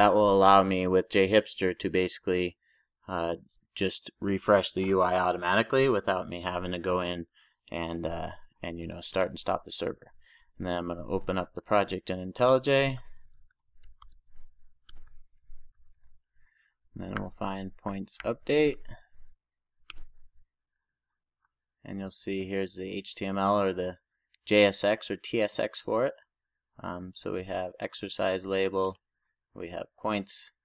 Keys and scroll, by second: 15.8 ctrl+shift+super+o.